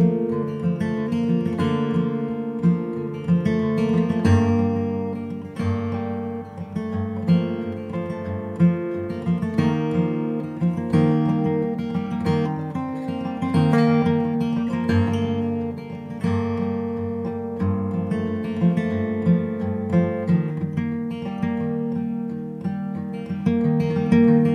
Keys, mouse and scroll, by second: 0.1-1.4 middle drag, 2.9 Tab, 3.4 middle click, 4.1 click, 4.9 Tab, 5.3 middle click, 5.9 middle click, 6.3-7.3 drag, 7.3 middle click, 7.8-9.2 drag, 11.6-13.0 middle drag, 13.5-17.3 drag, 17.6 click, 18.0 middle click, 18.5 middle click, 19.4 ctrl+s, 19.5 click, 20.2 middle click, 20.9 right click, 21.1 click, 21.6 g, 22.6 Tab, 22.7-24.4 drag, 23.6 right click, 24.1 p.